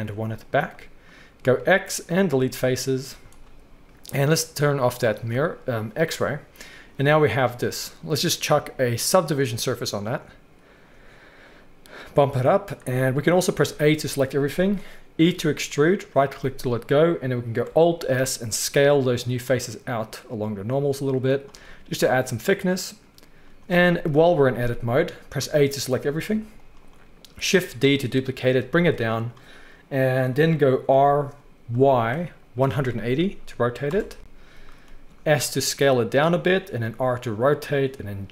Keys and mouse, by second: 1.4 x, 3.1 z, 4.8-8.5 drag, 8.5-9.1 middle drag, 9.1-21.5 drag, 13.6 a, 15.2 e, 18.0 alt+s, 21.5-29.2 middle drag, 24.1 KP_3, 25.4 a, 26.2 g, 27.6 shift+d, 30.9 r, 35.3 s, 36.8 r.